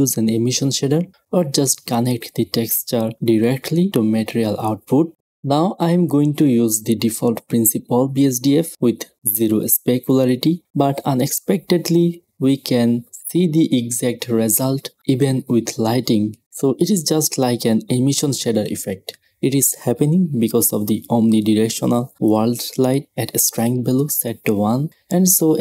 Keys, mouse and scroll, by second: 4.9-6.9 drag, 7.2-9.2 drag, 9.2-11.0 middle drag, 11.0-13.0 drag, 13.6-15.6 middle drag, 15.7-17.7 middle drag, 17.0-19.0 drag, 19.7-22.1 middle drag, 22.1-24.1 drag, 24.1-25.6 middle drag.